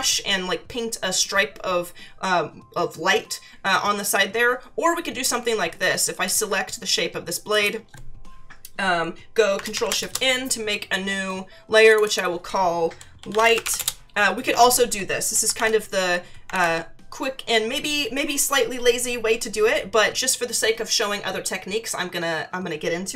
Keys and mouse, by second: 6.2 click, 7.5 click, 9.7 ctrl+shift+n, 10.0 Return, 11.9 click, 12.9-14.1 typing, 16.5 ctrl+=, 20.1 click.